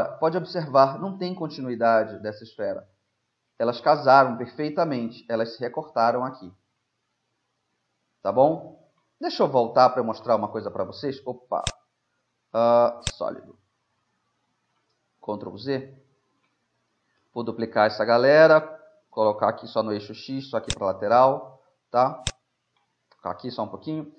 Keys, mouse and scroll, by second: 0.8 middle click, 4.0 middle click, 4.1 z, 9.4 middle click, 10.3 shift+z, 11.0 middle click, 11.8-13.6 drag, 14.5 middle click, 15.5 ctrl+z, 17.2 shift+d, 21.1-22.3 middle drag, 22.3-24.0 drag, 24.0-24.1 middle drag.